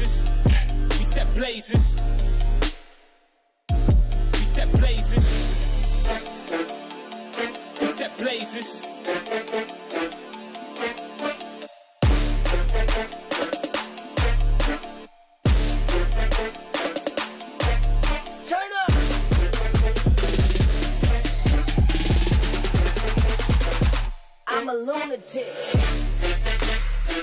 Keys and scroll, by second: 3.6 ctrl+j.